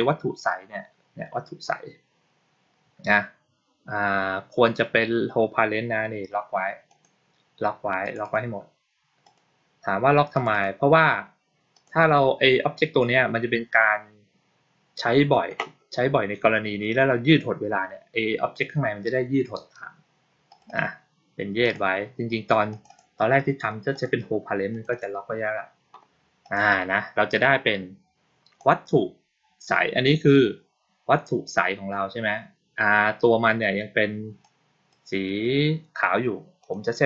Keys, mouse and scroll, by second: 6.7 click, 7.9 click, 8.1 click, 9.1 click, 10.2 click, 10.4 click, 11.6 click, 20.4 click, 20.5 click, 21.5 click, 22.6 click, 24.6 click, 24.8 click, 26.3 click, 28.4 click, 34.3 click, 36.5 click.